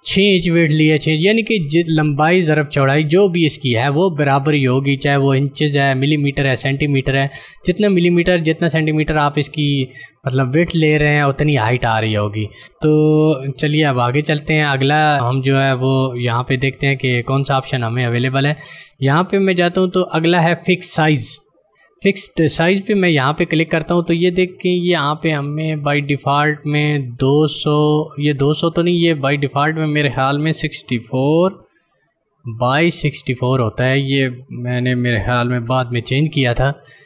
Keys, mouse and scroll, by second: 13.3 ctrl+d, 18.4 click, 23.2 click, 29.3 click, 33.3 click.